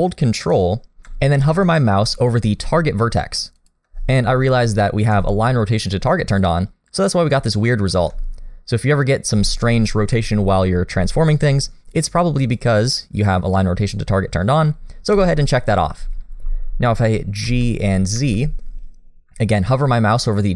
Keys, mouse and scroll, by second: 7.9 ctrl+z, 12.4 click, 17.4 g.